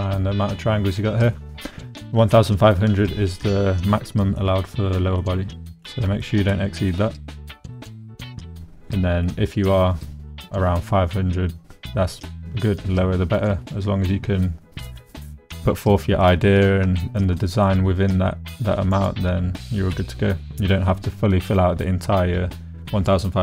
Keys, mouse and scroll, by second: 4.2 shift+middle click, 5.2 middle click, 6.2 shift+middle click, 6.9 middle click, 7.5 middle click, 13.0-14.1 middle drag, 17.0 shift+middle click, 17.4 middle click, 19.6 shift+middle click.